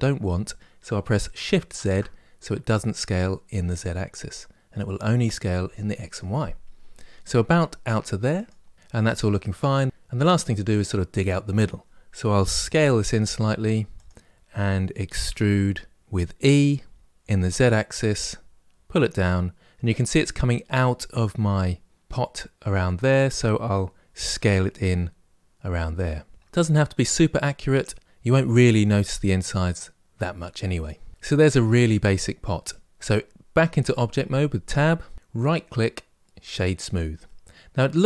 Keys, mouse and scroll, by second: 8.7-9.9 middle drag, 12.4 s, 15.1 e, 24.0 s, 26.5-28.1 middle drag, 31.1-33.3 middle drag, 33.3 Tab, 35.1-37.0 right drag, 37.0-38.0 middle drag.